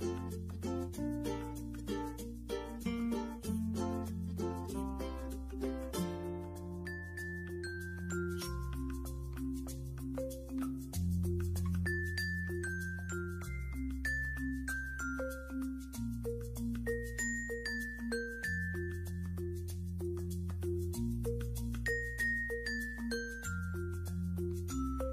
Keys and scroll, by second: 5.1 ctrl+g, 18.7 f.